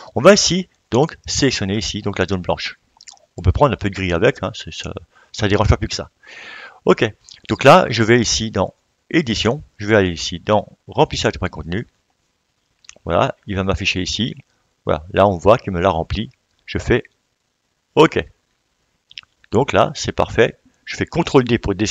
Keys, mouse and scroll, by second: 18.2 click, 18.8-21.9 drag.